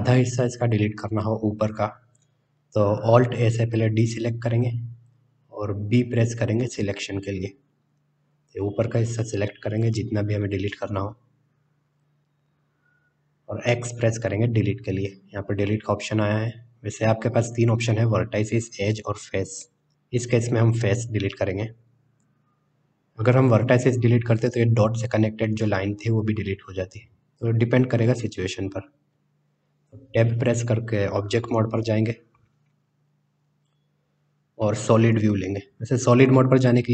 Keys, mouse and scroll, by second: 1.3 KP_1, 4.3 alt+a, 6.4 b, 14.0 x, 31.1-31.8 middle drag, 33.4 Tab.